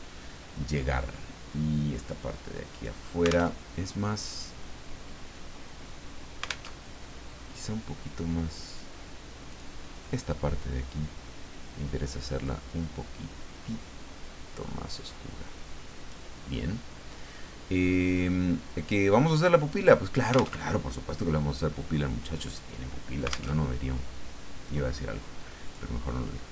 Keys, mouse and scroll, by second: 2.7 click, 3.5 alt+Tab, 6.7 alt+Tab, 9.5 click, 12.4-16.3 drag, 19.7 click, 20.7 alt+Tab, 23.6 alt+Tab, 25.6 click.